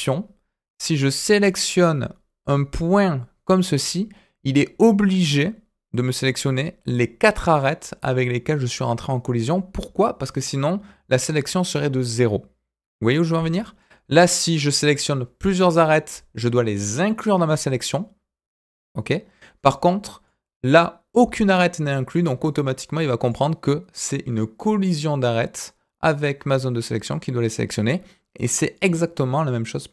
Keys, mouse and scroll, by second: 0.8-6.3 drag, 13.8-17.5 drag, 20.2 click, 20.7-23.3 drag, 28.7 click.